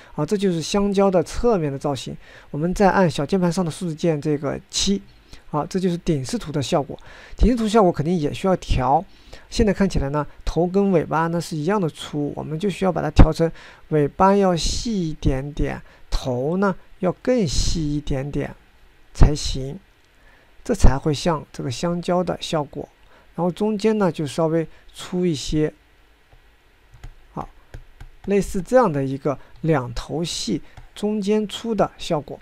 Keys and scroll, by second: 4.1 7.